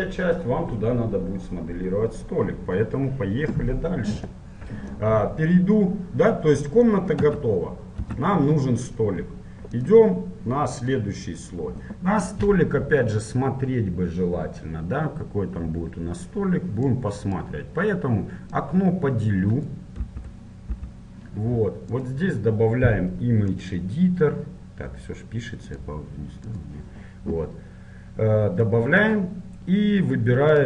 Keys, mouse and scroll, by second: 0.1-1.9 scroll up 1, 1.9 scroll up 1, 4.5-8.4 middle drag, 7.4 Tab, 8.1 Tab, 9.8-11.8 drag, 17.0-20.6 drag, 20.2 t, 20.8 t.